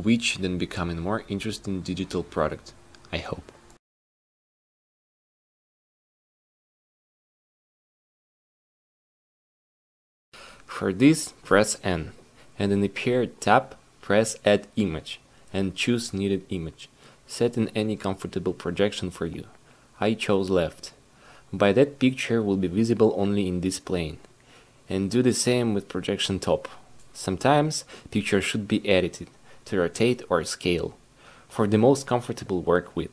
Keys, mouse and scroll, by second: 1.7 s, 10.5 q, 16.0-19.9 drag, 19.9 q, 22.8 click.